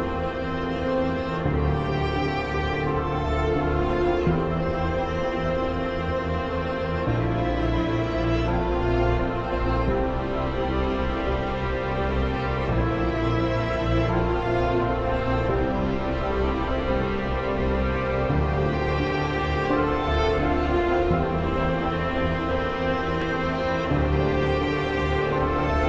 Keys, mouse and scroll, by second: 0.4 Escape, 0.8-5.1 drag, 5.1 F12, 6.1 click, 7.0 Return, 8.1 click, 9.0 ctrl+r, 9.6 F3, 10.2 click, 11.0 ctrl+r, 11.6-12.7 typing, 13.9 click, 14.4 F3, 15.0 F4, 15.5 F2, 16.3 click, 16.3-19.6 drag, 19.6 F2, 19.8-24.4 drag, 24.4 F3.